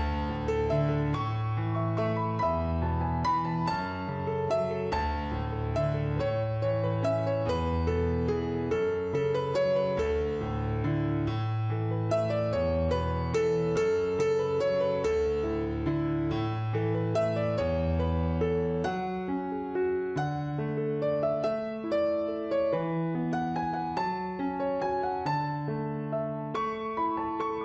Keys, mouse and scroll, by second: 0.1 w, 0.9 click, 3.6 click, 3.7 F3, 3.8 click, 6.4 click, 6.9 click, 7.0 w, 7.2 click, 8.1 r, 8.3 click, 11.1 w, 11.7 click, 14.2 click, 16.5 w, 16.9 click, 19.2 click, 21.9 click, 24.0 click, 27.3 click.